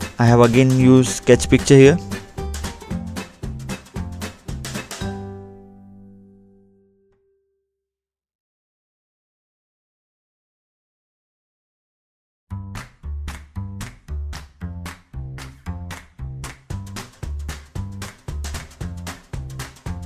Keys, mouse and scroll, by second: 0.2 scroll down 2, 1.7 middle click, 2.2-2.5 scroll up 2, 2.8 scroll up 1, 3.5 middle click, 4.2 scroll down 2, 4.3 scroll up 2, 4.6-5.0 scroll down 2, 5.2 click, 5.3-5.6 scroll down 1, 7.1 scroll up 2, 7.9-8.3 scroll down 2, 10.1 scroll down 2, 11.4 middle click, 12.4 scroll up 2, 13.2-13.6 scroll up 1, 14.3 middle click, 15.2 scroll down 2, 17.4-18.1 scroll up 1, 19.2 scroll up 1.